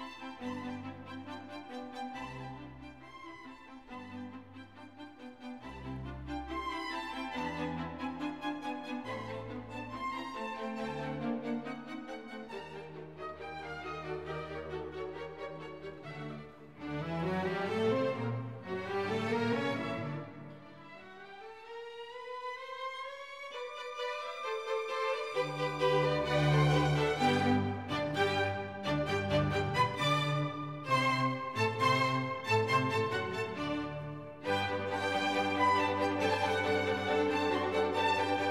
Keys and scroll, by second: 1.7 F1, 3.6 Escape, 5.9 2, 6.1 0, 6.3 Return.